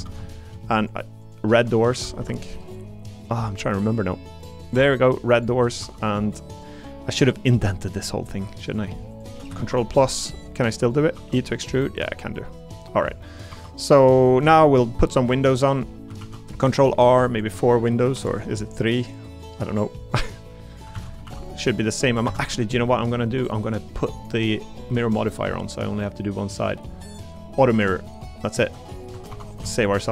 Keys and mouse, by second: 2.2 g, 5.3 click, 5.8 3, 6.1-8.8 drag, 9.1 shift+click, 9.6 ctrl+KP_Add, 10.2 middle click, 11.1 e, 12.6 click, 13.2 middle click, 13.5 3, 13.8 click, 14.2 middle click, 15.0 middle click, 15.6 click, 16.2 ctrl+r, 17.7 click, 17.7 middle click, 18.1 ctrl+r, 19.7 click, 20.4 middle click, 20.9 ctrl+z, 21.2 ctrl+r, 22.9 middle click, 25.2 click, 26.6 click, 28.1 middle click, 28.5 click, 28.7 Tab, 29.1 Tab, 29.3 3, 29.8 shift+click.